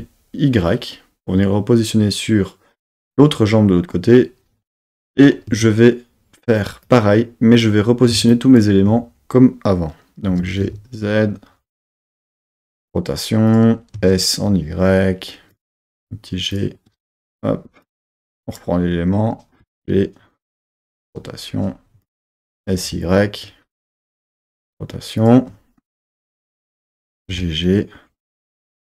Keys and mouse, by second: 2.8-5.3 drag, 5.5 Tab, 6.9 click, 8.3 shift+click, 10.3 g, 10.6 z, 12.4 click, 12.7 r, 13.5 click, 14.0 s, 14.4 y, 15.5 click, 15.7 g, 16.5 click, 16.9 r, 17.9 click, 19.6 g, 20.7 click, 21.0 r, 22.1 click, 22.5 s, 22.9 y, 24.0 click, 24.5 r, 25.2 click, 25.9 click, 27.2 g, 27.3 g, 28.6 click.